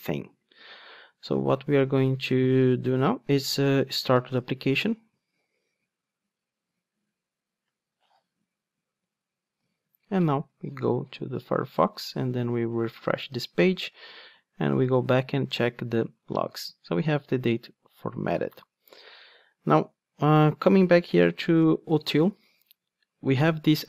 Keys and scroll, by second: 4.3 ctrl+r, 21.3 Right, 21.6 Down.